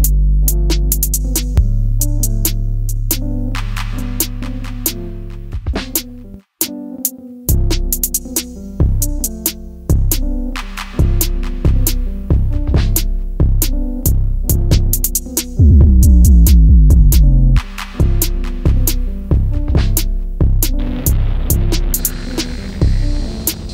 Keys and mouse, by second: 1.0 s, 2.5 click, 2.5 s, 3.9 x, 5.0 click, 5.2-10.6 middle drag, 10.8 s, 11.8 click, 12.1-13.4 middle drag, 14.3 click, 15.4 click, 15.9 middle click, 17.8-18.2 middle drag, 18.5 Tab, 21.4 s, 22.8 click.